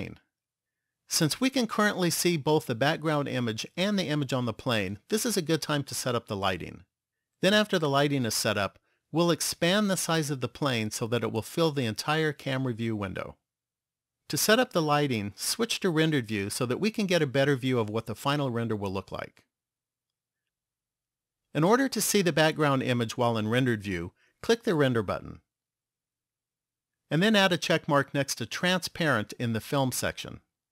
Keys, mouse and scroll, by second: 15.6 click, 24.7 click, 26.3 click, 30.3 click.